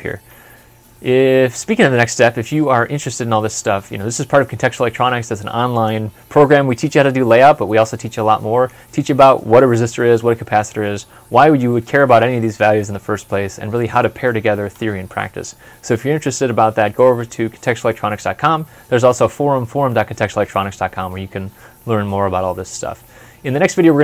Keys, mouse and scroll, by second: 1.4 ctrl+F11.